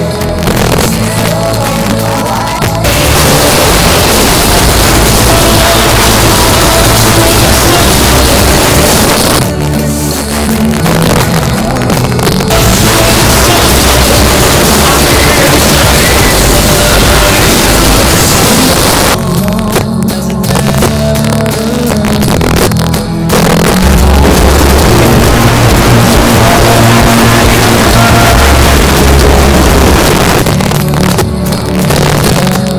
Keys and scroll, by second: 9.0 Page_Down, 18.8 Page_Down, 29.9 Page_Down.